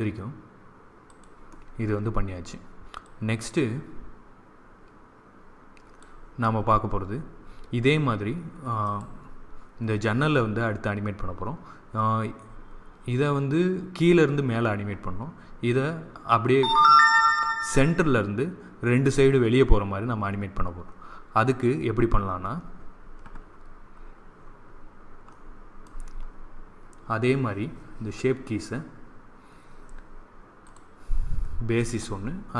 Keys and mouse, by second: 1.0-2.8 drag, 3.0-4.9 drag, 8.7-10.6 drag, 25.2-30.6 middle drag, 30.6-32.5 drag.